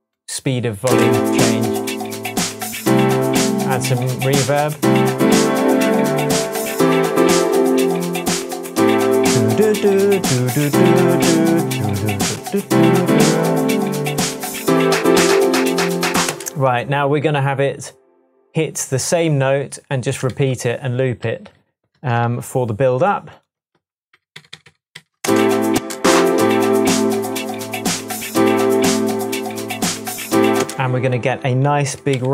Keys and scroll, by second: 0.8 space, 16.2 space, 20.3 d, 21.3 z, 22.2 c, 23.7 super+v, 24.1 super+d, 24.7 super+d, 25.2 super+space, 25.7 space, 30.6 space, 32.1 super+t.